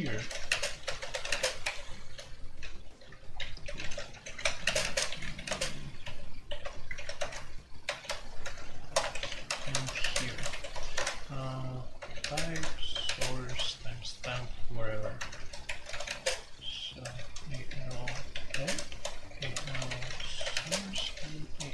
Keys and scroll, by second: 0.0-21.7 typing.